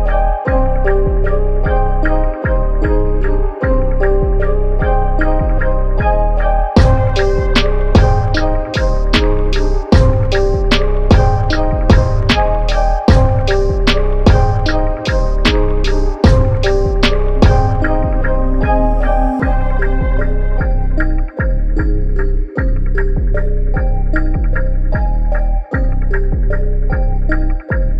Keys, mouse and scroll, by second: 1.0 s, 3.7 g, 5.7 Tab, 6.2 ctrl+r, 8.3 ctrl+z, 8.6 ctrl+r, 10.3 click, 11.5 s, 13.1 click, 13.7 s, 15.4 Tab, 15.7 middle click, 16.3 Tab, 16.5 middle click, 17.0 click, 17.9 click, 21.9-22.6 scroll up 1, 25.1 click, 25.8 e, 27.0 e.